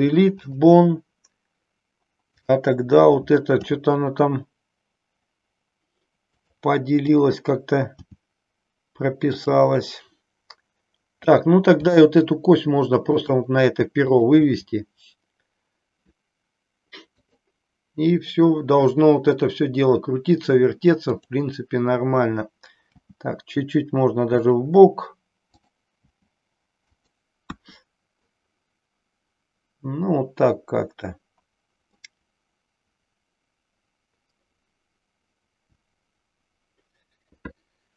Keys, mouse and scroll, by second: 2.2 click, 3.5 g, 8.0 g, 11.3 click, 12.0 g, 13.3 click, 14.0 click, 14.8 g, 17.1 click, 21.1 click, 22.9 g, 25.5 click, 27.5 KP_1, 31.9-37.9 middle drag.